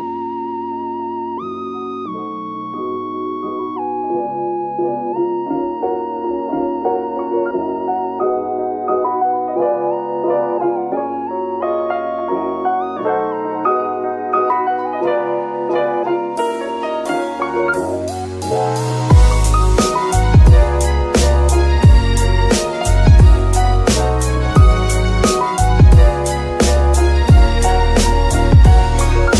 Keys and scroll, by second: 8.6 shift+z, 15.0 z, 16.3 g, 21.9 shift+g, 27.2 ctrl+shift+c, 28.2 alt+g.